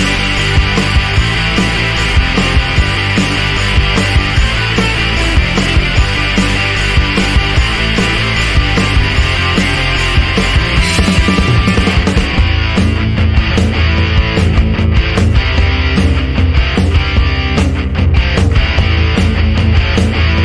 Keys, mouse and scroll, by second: 0.9 click, 1.8 click, 3.2 ctrl+click, 3.9 g, 4.4 click, 5.5-6.3 drag, 6.5 click, 7.7 F1, 8.4 click, 9.2 click, 10.0 click, 11.1 click, 11.4-13.2 typing, 14.6 click, 15.2 click, 15.7 click, 16.0 click, 16.9 click, 17.4 click, 18.3 click, 19.9 click, 20.3 click.